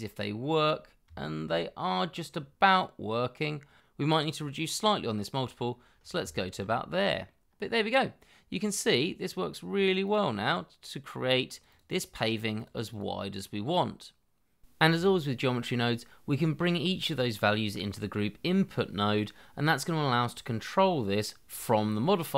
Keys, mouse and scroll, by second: 1.1 shift+middle click, 2.6-3.8 scroll down 1, 4.2 shift+middle click, 7.8-8.4 scroll down 2, 8.1 shift+middle click, 8.4 middle click, 8.7-10.3 scroll up 1, 10.8 double click, 14.7 scroll down 1, 14.8-15.4 scroll up 1, 15.4 scroll down 1, 15.8 scroll up 1, 19.0 n, 19.3 scroll down 1, 20.1 double click, 21.0 shift+s, 21.2 c, 21.4 l, 21.7 t, 22.0 Delete.